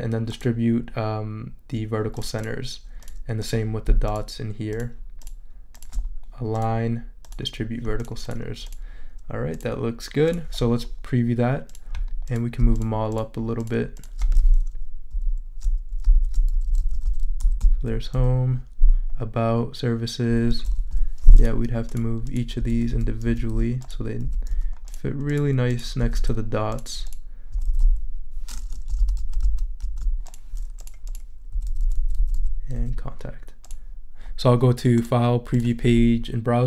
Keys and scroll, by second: 15.1 shift+Up, 16.1 shift+Down, 16.5 shift+Up, 20.9 Down, 22.6 Down, 26.0 Down, 27.5 Down, 29.0 super+z, 31.5 Down, 32.7 Up.